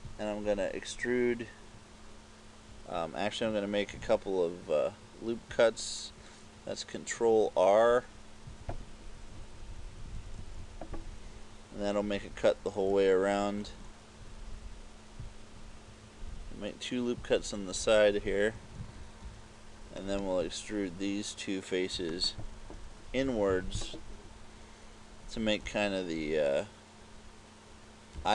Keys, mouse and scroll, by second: 0.4 click, 4.0 ctrl+r, 8.8 click, 9.6 KP_6, 10.2 KP_4, 10.6 KP_4, 10.8 KP_4, 13.6 ctrl+r, 17.5 click, 18.9 ctrl+Tab, 20.2 right click, 22.3 shift+right click, 23.3 KP_6, 23.6 KP_6, 25.7 e.